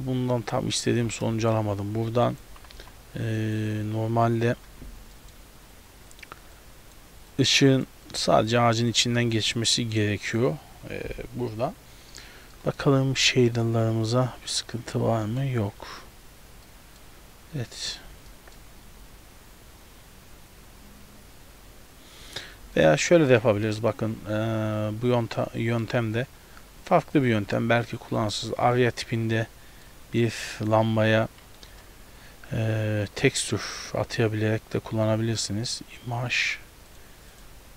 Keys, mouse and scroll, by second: 0.0 z, 0.6-1.0 scroll up 2, 1.0 g, 2.5 g, 4.6-5.3 scroll down 7, 5.2 middle click, 6.2 click, 6.6 click, 7.4 click, 8.1 click, 8.5 click, 9.1 a, 9.3 a, 9.6 click, 10.0 click, 12.6 middle click, 13.6 click, 13.9 click, 15.3 middle click, 15.7-16.7 scroll up 1, 16.7 middle click, 17.1-18.3 scroll up 2, 18.3 middle click, 22.2-23.4 scroll down 3, 22.7 x, 23.4 right click, 28.3 click, 29.9 middle click, 30.6 click, 31.7 shift+a.